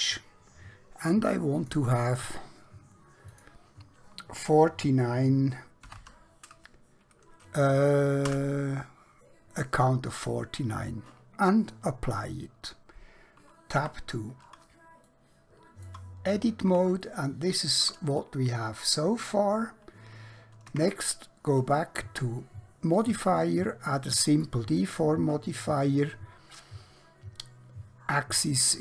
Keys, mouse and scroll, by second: 1.6 click, 5.9 typing, 8.3 Return, 12.1 click, 13.8 Tab, 15.1 shift+middle click, 16.3-16.9 scroll down 1, 17.1 shift+middle click, 20.8 Tab, 23.0 click.